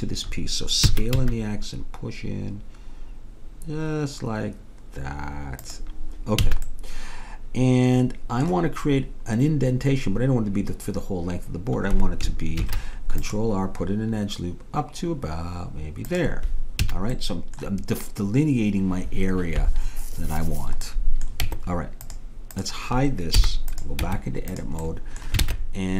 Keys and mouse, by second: 0.9 s, 6.5 a, 12.6 ctrl+r, 16.9 a, 17.2-20.1 drag, 20.9 click, 21.5 Tab, 22.6-25.4 drag, 23.4 h, 24.1 Tab, 25.5 ctrl+Tab.